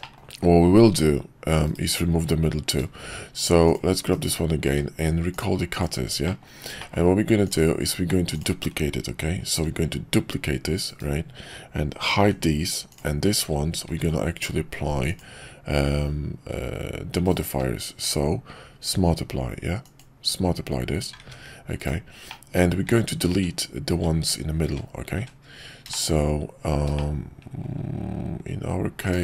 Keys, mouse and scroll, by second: 0.0 shift+middle drag, 4.1 /, 4.6 q, 6.2 middle click, 6.8 shift+middle click, 9.8 shift+d, 12.2 h, 13.9 ctrl+`, 17.4 q, 21.2 ctrl+`, 22.3-22.6 middle drag, 22.8 `, 23.3 `, 25.9 middle click, 26.9-27.6 middle drag.